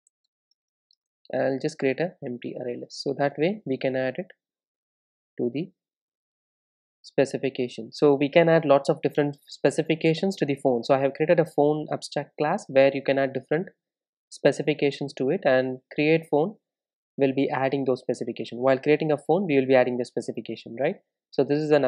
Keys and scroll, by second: 0.1 Return, 5.3 super+s.